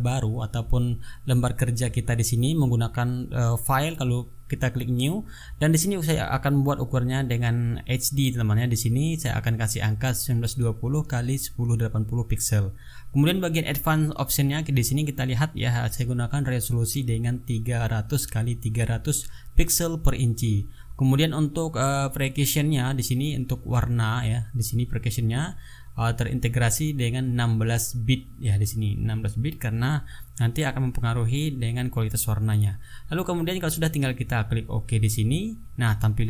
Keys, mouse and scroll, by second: 2.7 click, 4.0 click, 13.8 click, 21.8 click, 23.2 click, 27.4 click, 28.6 click, 34.8 click.